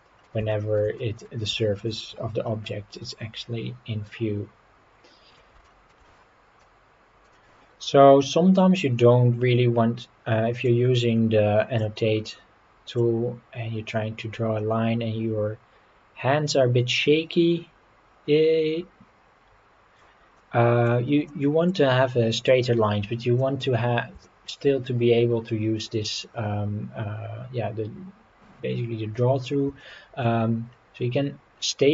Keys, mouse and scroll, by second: 0.5 shift+middle click, 1.0 middle click, 1.6 shift+middle click, 2.0 scroll up 3, 2.5 scroll down 3, 2.9-5.4 middle drag, 5.6 shift+middle click, 7.3 middle click, 7.3 scroll down 1, 10.7-11.9 drag, 13.0-20.1 drag, 20.4 middle click, 21.3 middle click, 22.0-23.1 scroll down 7, 23.4 middle click, 23.8 scroll down 2, 24.3 shift+middle click, 24.9 scroll up 3, 29.8 shift+middle click.